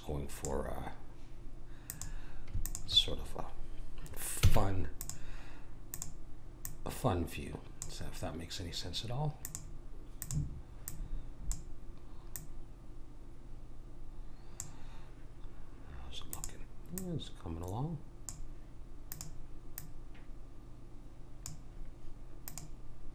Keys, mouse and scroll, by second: 1.8 click, 4.4 w, 5.9 click, 10.2-14.1 drag, 16.3 click, 19.1 click, 22.5 click.